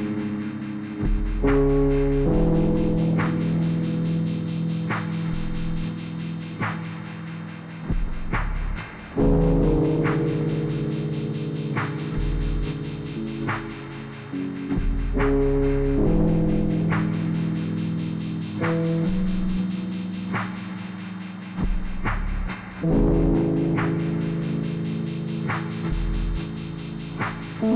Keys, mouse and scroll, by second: 0.6 click, 1.2 click, 6.0 click, 7.2 typing, 9.5 click, 10.8 click, 11.3 scroll down 1, 11.6 click, 12.0 e, 12.4-13.9 drag, 13.9 r, 14.2 click, 14.6 e, 14.8 click, 16.9 click, 18.0 click, 20.5-22.7 drag, 23.2 scroll up 1, 23.9-25.0 drag.